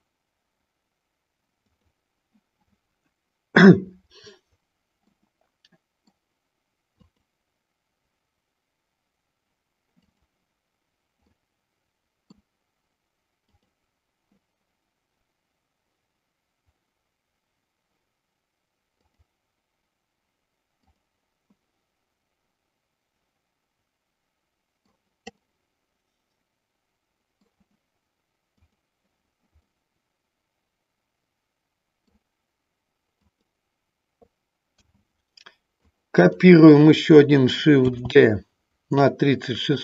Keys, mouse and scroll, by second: 1.6 click, 5.1 middle click, 6.9 click, 10.1 click, 11.2-12.3 middle drag, 13.5 click, 19.0 click, 20.9 click, 21.5-25.0 middle drag, 25.3-27.4 middle drag, 28.6 click, 29.7-32.1 middle drag, 33.2 click, 34.7 a, 35.7 click, 37.8 shift+d.